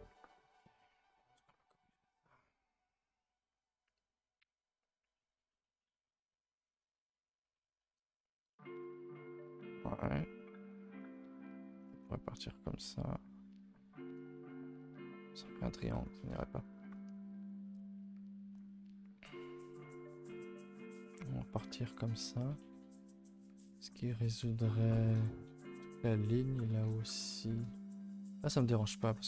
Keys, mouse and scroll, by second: 0.3 ctrl+s, 1.8 k, 17.4 k, 27.5 scroll down 2, 27.7 shift+middle click, 27.9 scroll up 2, 28.1 a, 28.3 a, 29.0 ctrl+t.